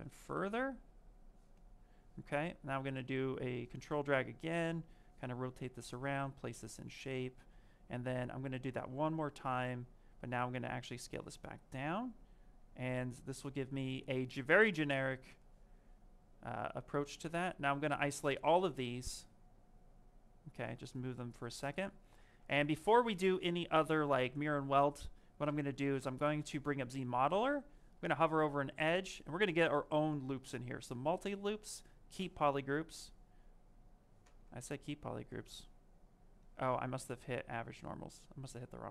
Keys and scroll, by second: 20.4 q, 28.9 space, 35.3 space.